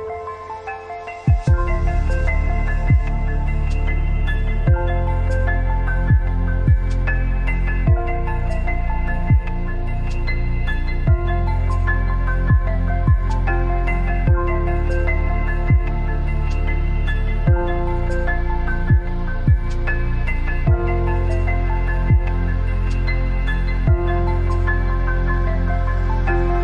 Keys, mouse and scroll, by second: 2.0 t, 2.2 click, 4.3 scroll down 1, 6.8 click, 11.3 click, 12.1 Up, 14.4 alt+scroll up 1, 15.4 scroll down 1, 16.0 click, 18.6 click, 20.5 shift+click.